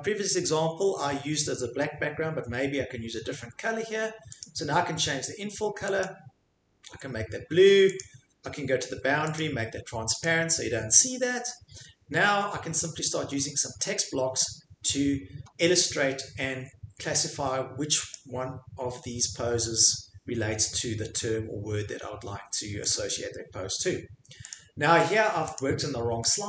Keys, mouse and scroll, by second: 2.8 click, 4.4 click, 6.0 click, 8.0 click, 9.4 click, 10.2 click, 18.1 click, 22.9 click, 24.5 click, 25.6 click, 26.3 click.